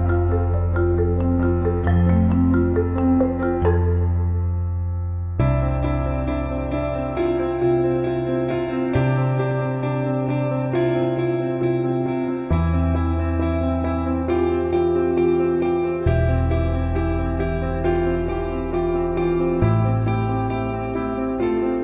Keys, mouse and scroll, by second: 1.6 middle click, 2.4 middle click, 2.7 middle click, 5.5 middle click, 10.6 middle click, 11.8 middle click, 12.2 middle click, 12.4 middle click, 13.8 middle click, 16.9 middle click, 20.1 middle click, 20.6 middle click, 21.3 middle click, 21.5 middle click, 21.7 middle click.